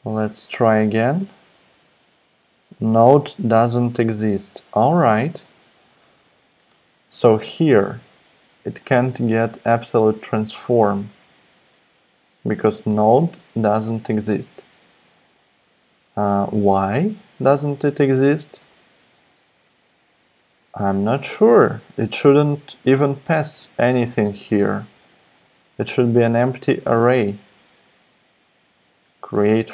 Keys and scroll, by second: 4.3 super+Tab.